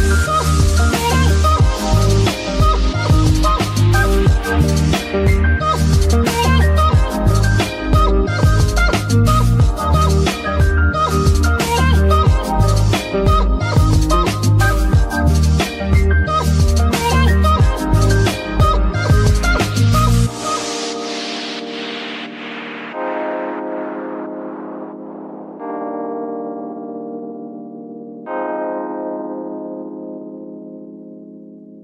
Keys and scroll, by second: 11.0 r, 11.1 a, 11.3 k, 11.3 e, 13.8 shift+-, 17.9-18.8 typing, 20.0-21.8 typing, 22.5 Return, 24.1 g, 24.7 Tab, 25.3 s, 26.2 Tab, 26.6 s, 28.0 KP_3, 28.4 KP_3, 29.7 g.